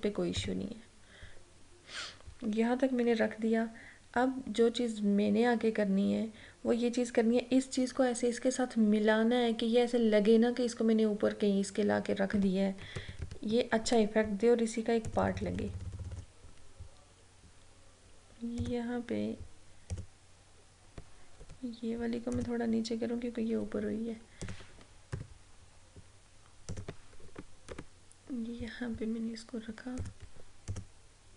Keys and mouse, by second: 13.0 ctrl+=, 15.1 click, 18.7 click, 21.5 Down, 22.4 click, 25.2 a, 26.8 click, 27.2 Right, 30.1 click.